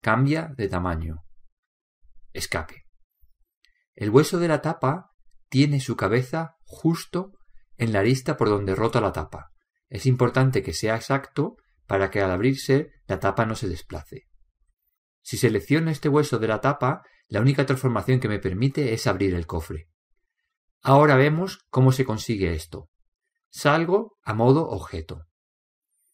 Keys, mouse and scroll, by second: 7.1 right click, 7.7-9.6 middle drag, 8.7 right click, 21.1 g.